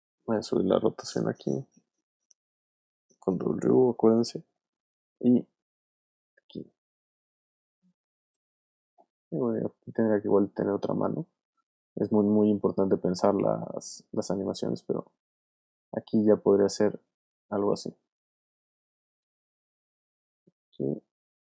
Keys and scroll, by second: 1.2 w, 18.9 v.